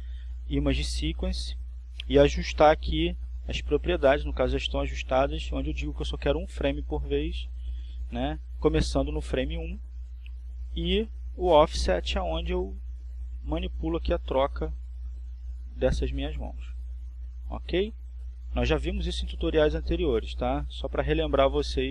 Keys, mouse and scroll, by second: 2.9-4.4 drag, 5.9 click, 16.0 click, 17.9 click, 19.4 click, 21.0 click.